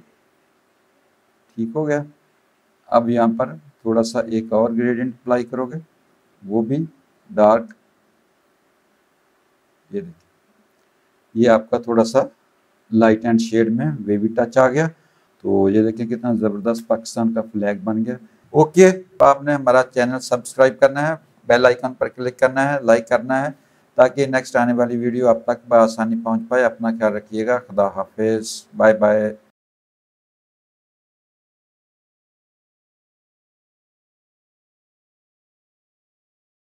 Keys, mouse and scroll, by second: 6.6 alt+click, 15.2 z, 15.5 alt+click, 16.2 space, 16.3 click, 17.2 click, 18.4 space.